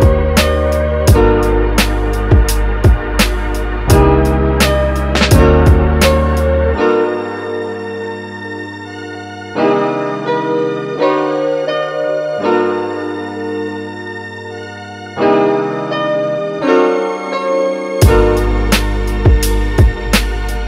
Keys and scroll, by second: 14.3 space, 16.2 x, 19.7 super+z.